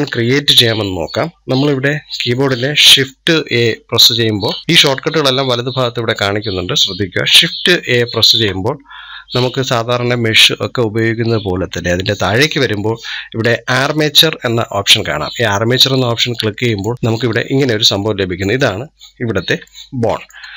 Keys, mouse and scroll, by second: 3.3 shift+a, 7.7 shift+a, 17.0-17.8 middle drag, 17.8-18.2 scroll up 6, 19.5-20.5 shift+middle drag.